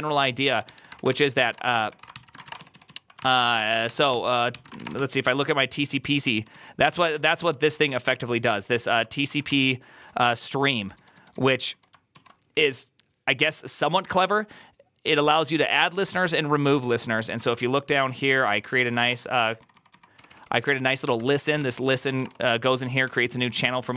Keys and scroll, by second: 0.0-5.1 typing, 5.1 ctrl+u, 5.8 ctrl+u, 6.0 ctrl+u, 6.2 ctrl+u, 6.4 ctrl+u, 6.7 ctrl+c, 6.8-8.7 typing, 9.2 ctrl+d, 9.9-11.6 typing, 12.0 ctrl+u, 13.9 ctrl+d, 17.5 ctrl+u, 18.2 ctrl+u, 18.5 ctrl+c, 18.6-23.9 typing.